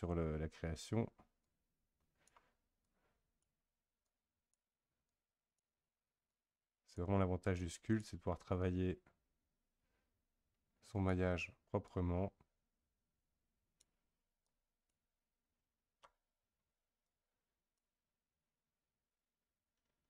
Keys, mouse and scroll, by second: 1.4-11.6 drag, 11.8-16.3 drag, 16.3-17.0 scroll up 1, 17.0-20.0 drag.